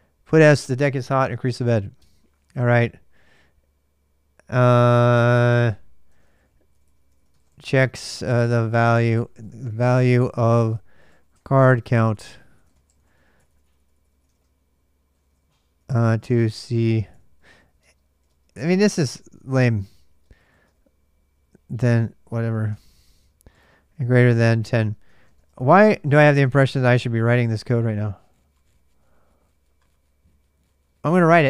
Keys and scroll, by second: 1.7 super+Tab, 5.7-26.5 typing.